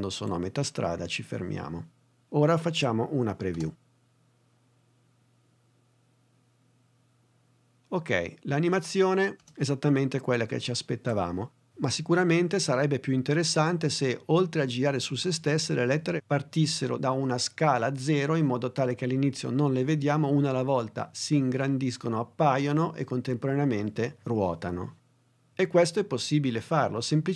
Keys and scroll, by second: 3.6 space.